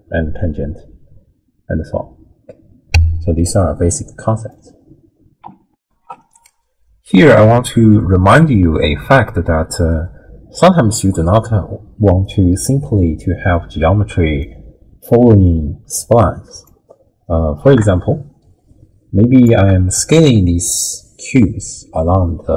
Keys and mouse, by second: 3.6 middle click, 4.0 click, 5.8 ctrl+alt+shift+w, 6.1 ctrl+alt+shift+q, 13.5-14.5 middle drag, 16.7-19.5 drag, 20.7-22.5 drag.